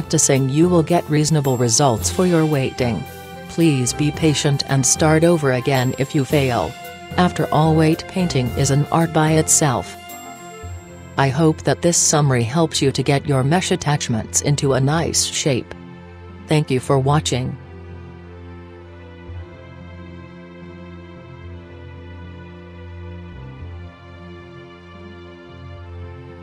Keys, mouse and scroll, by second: 4.3 middle click, 4.7-6.4 middle drag, 7.0-8.6 drag, 9.1-10.9 right drag, 11.8-13.5 drag, 13.7-17.7 middle drag, 17.7 KP_1.